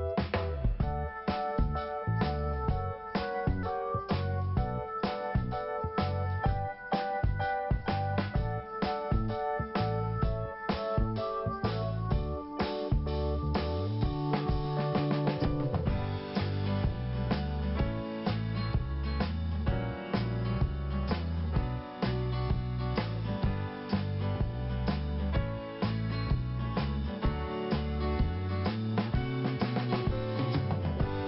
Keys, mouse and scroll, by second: 5.0 scroll down 1, 5.7-6.2 scroll down 2, 8.7 scroll up 2, 10.8 click, 11.5 right click, 12.3 click, 13.0 click, 14.0 click, 14.8 right click, 15.8 click, 16.8 double click, 18.8 click, 18.9 click, 19.3 click, 20.9-21.6 scroll down 1, 22.1 click, 22.9 click, 24.4 scroll down 2, 24.5 click, 25.4 click, 26.4 click, 26.6 click, 28.1 scroll down 1, 29.5 scroll up 1, 30.5 scroll up 1.